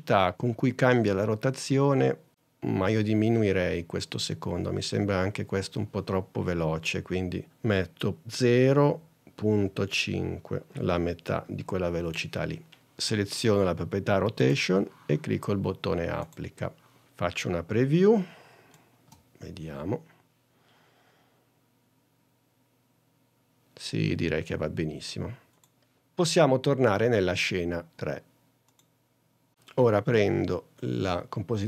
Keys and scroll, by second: 8.6 0, 10.2 5, 19.0 space.